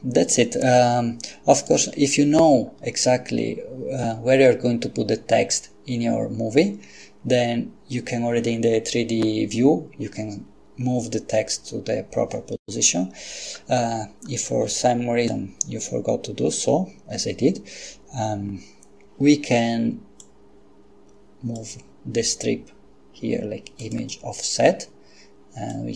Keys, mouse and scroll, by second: 20.2-22.1 drag, 23.8 click, 25.7-25.9 drag.